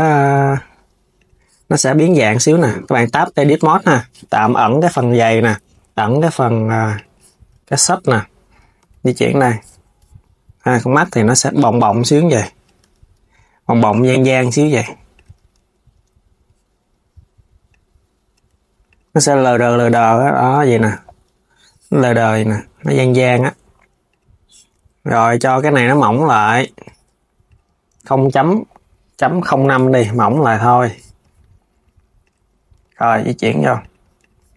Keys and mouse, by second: 0.9 click, 2.3 Tab, 4.6 click, 6.6 click, 7.2 Tab, 7.7 KP_3, 8.5 g, 8.9 Tab, 10.5 click, 11.1 click, 14.8 click, 15.2 KP_1, 17.4 click, 18.6 click, 19.1 click, 20.5 Tab, 22.5 Tab, 23.8-25.3 drag, 25.8 click, 26.2 Tab, 27.2-30.2 drag, 30.3 click, 31.9 click, 32.1 KP_3, 32.5 g, 33.9 click, 34.3 KP_1.